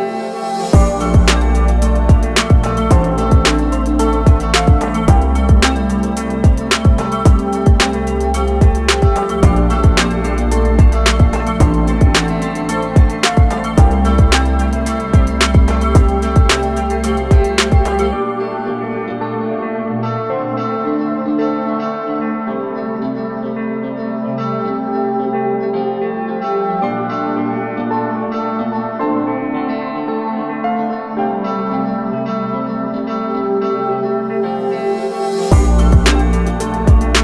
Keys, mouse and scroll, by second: 11.0 click, 12.8 i, 13.5 click, 17.7 a, 18.1 click, 19.4 i, 21.0 click, 22.3 a, 22.5 click, 26.7 a, 27.2 click, 36.1 click.